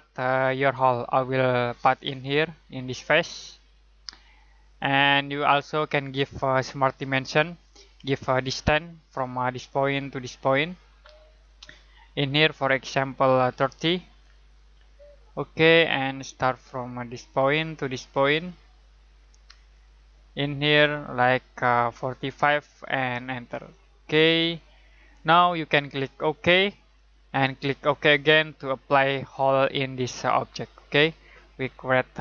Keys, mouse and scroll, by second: 2.2 click, 7.6 click, 13.5-14.1 typing, 15.2 click, 21.9-22.3 typing, 23.5 click, 26.9 click, 30.7 middle click.